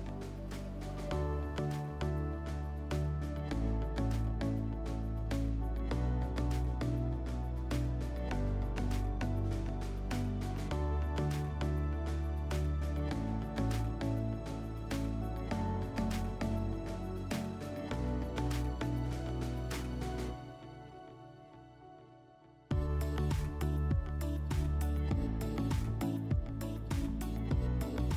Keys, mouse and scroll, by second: 0.3 Return, 2.1 typing, 2.9 Return, 9.4 click, 9.5 click, 10.2-11.4 typing, 13.1-13.9 typing, 14.8 click, 15.0 click, 15.4-16.5 typing, 18.3-20.0 typing, 19.1 click, 20.4 Tab, 21.4 Return, 24.4 click, 25.0 typing, 25.2 Tab, 25.6 Tab, 26.0 typing.